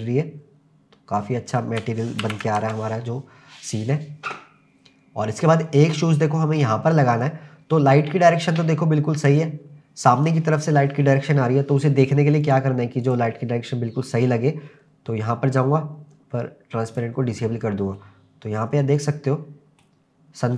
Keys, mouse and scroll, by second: 2.2 ctrl+s, 2.6 KP_0, 4.2-5.2 scroll down 1, 5.2 scroll down 1, 12.4 click, 13.0 click, 15.5-16.0 scroll down 3, 16.9 click, 18.0-19.9 middle drag.